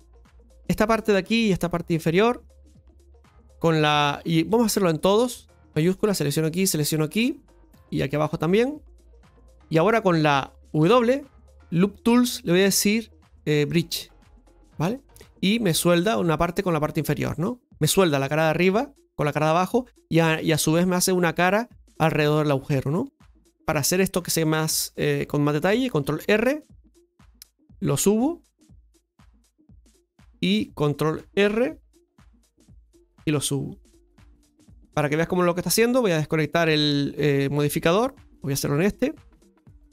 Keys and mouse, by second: 0.5 right click, 0.9 middle click, 2.1 shift+right click, 2.4 middle click, 5.9-6.9 shift+right drag, 7.1 middle click, 8.5 shift+right click, 9.1 shift+right click, 9.6 middle click, 10.8 w, 15.1 middle click, 16.8 middle click, 17.4 shift+middle click, 23.2 middle click, 26.1 ctrl+r, 30.0 shift+middle click, 35.1-37.0 drag, 37.4-38.7 shift+middle drag, 38.8 shift+middle click.